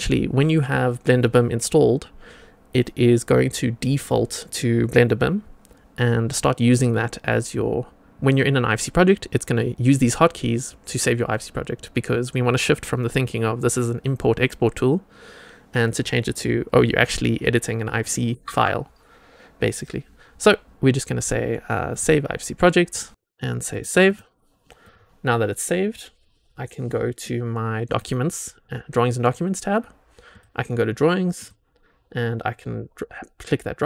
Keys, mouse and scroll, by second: 22.6 click, 22.9 click, 23.7 click, 24.7 click, 27.8 click, 30.2 click, 31.3 click.